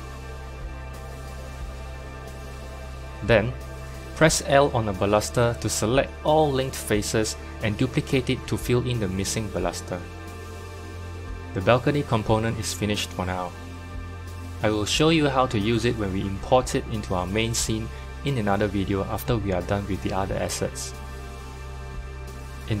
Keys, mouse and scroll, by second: 1.2 click, 2.1 scroll down 1, 2.4 shift+middle click, 3.2 KP_7, 3.9 scroll up 2, 4.3 shift+middle click, 5.1 Tab, 6.3 shift+d, 11.6 Tab, 16.3 scroll down 1, 16.4-16.8 scroll down 1, 16.8-22.8 middle drag.